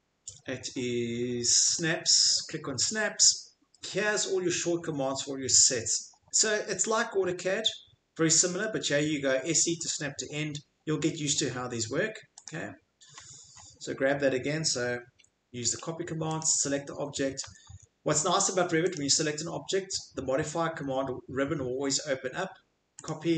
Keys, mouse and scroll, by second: 1.7 click, 12.4 click, 13.1-13.6 middle click, 13.1 middle click, 16.4 click, 17.4 Escape, 17.7 Escape.